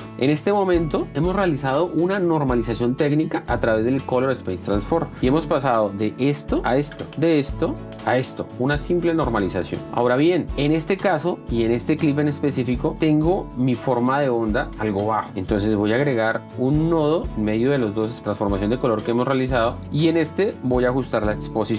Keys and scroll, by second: 0.8 F1, 5.2 F1, 8.8 shift+d, 10.5 F1, 16.2 s, 21.1 F2.